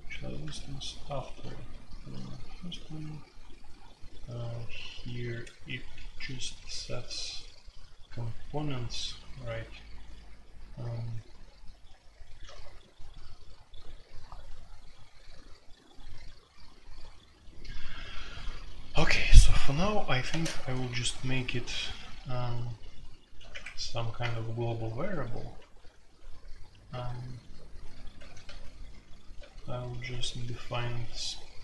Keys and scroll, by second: 0.0-2.2 typing, 12.5 n, 13.8-14.5 typing, 20.2-20.8 typing, 23.3 typing, 24.2 Return, 24.8-28.1 typing, 28.1 ctrl+d, 28.4 ctrl+d, 29.3 ctrl+d, 30.2 ctrl+d.